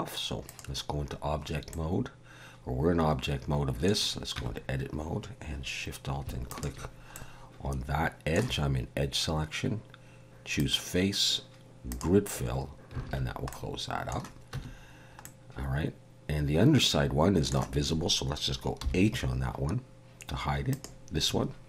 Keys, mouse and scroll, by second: 0.4 click, 1.7 middle click, 4.3 Tab, 6.5 alt+shift+click, 7.1 middle click, 10.6 click, 13.0 alt+a, 13.5 middle click, 14.5 Tab, 15.2 middle click, 18.8 h, 20.7 click.